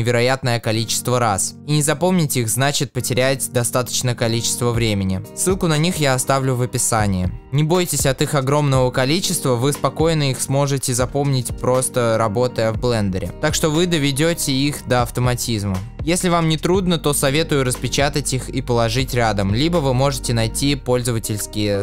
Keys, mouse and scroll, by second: 1.5-3.0 shift+middle drag, 3.0 shift+click, 4.3 shift+click, 5.1-8.8 shift+middle drag, 6.8 scroll down 1, 7.6 shift+d, 8.8 shift+click, 9.1-10.8 shift+middle drag, 10.8 shift+d, 10.8 click, 11.5 shift+d, 12.1 click, 12.3-13.4 middle drag, 13.4 shift+click, 13.8 shift+click, 14.2 shift+click, 14.6 shift+click, 15.0 shift+click, 15.4 scroll down 1, 15.7-17.0 middle drag, 16.4 shift+d, 17.0-17.7 scroll down 1, 17.7 shift+a, 21.6-21.8 middle drag, 21.6 x.